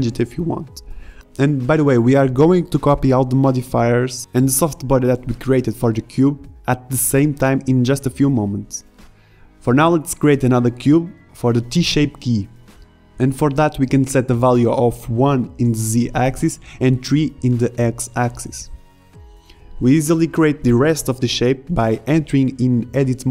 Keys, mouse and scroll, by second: 6.8 shift+a, 11.4 g, 17.4-20.5 drag, 20.5 g, 23.2 Tab.